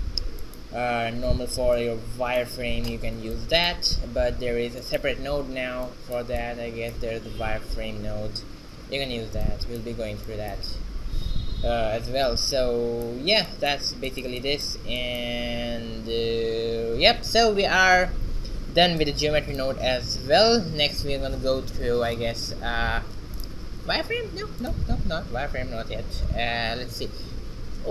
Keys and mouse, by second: 15.7 shift+z, 17.6-19.4 drag, 19.6 shift+a, 23.5 shift+a.